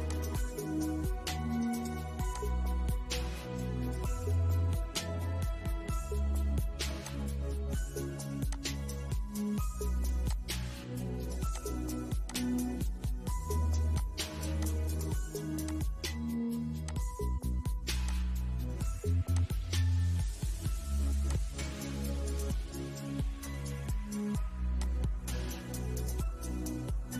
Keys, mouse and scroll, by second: 4.2 click, 16.5-17.1 scroll down 1, 17.3 click, 21.2 scroll down 1, 22.4-24.0 middle drag, 24.0 click, 26.8-27.1 drag.